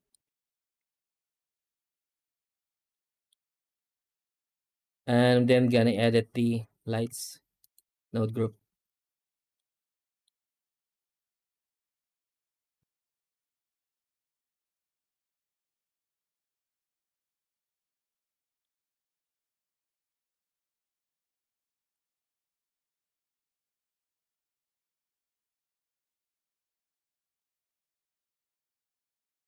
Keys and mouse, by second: 0.0 ctrl+space, 0.6 z, 2.8-3.2 middle drag, 4.2 z, 5.9 middle click, 6.9 z, 9.4-10.1 middle drag, 10.9 click, 12.6-14.4 shift+drag, 14.8 click, 16.6 click, 18.3 middle click, 19.3 click, 21.0-22.1 drag, 22.0 KP_0, 23.6-27.2 drag, 27.7 middle click, 29.3-29.4 drag.